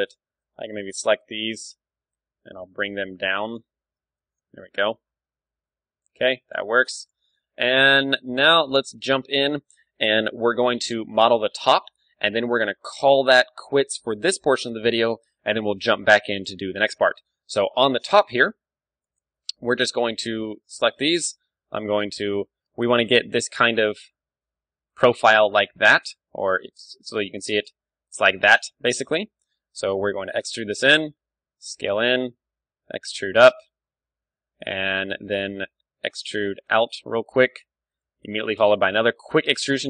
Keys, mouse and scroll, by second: 0.1 a, 0.2 b, 1.8 z, 2.1 g, 3.5 click, 3.6 Tab, 4.2 ctrl+w, 4.4 click, 4.4 z, 4.4 g, 4.7 click, 5.5-10.0 middle drag, 6.9 ctrl+w, 11.1-14.7 middle drag, 11.8 ctrl+w, 16.9 Tab, 17.1-20.8 middle drag, 21.3-23.0 middle drag, 23.1 d, 23.6 d, 23.6-25.4 drag, 25.1 d, 25.5 d, 25.6-27.1 right drag, 26.1 d, 26.6 d, 27.4-28.6 drag, 28.2 d, 28.4 d, 28.6 d, 28.9-30.0 right drag, 30.0 click, 30.0-31.1 middle drag, 30.0 e, 31.1-35.3 drag, 31.1 s, 32.3 e, 35.3-36.8 middle drag, 35.6 e, 36.8-39.8 drag, 36.9 s, 38.2 e, 39.7 Tab.